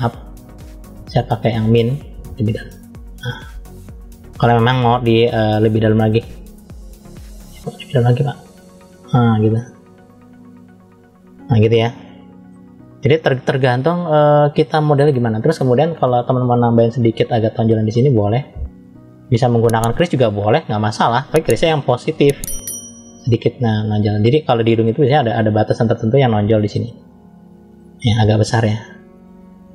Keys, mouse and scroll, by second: 0.0-1.1 drag, 1.5 click, 2.2 click, 5.0-5.7 scroll down 2, 5.7 middle click, 6.5 click, 11.2-11.6 scroll down 1, 11.6 middle click, 12.7-13.0 scroll up 1, 13.0-14.3 middle drag, 14.5 scroll up 1, 17.2 click, 19.8 click, 21.6 click, 22.8 click, 26.8 ctrl+z, 28.3 f, 29.4 click.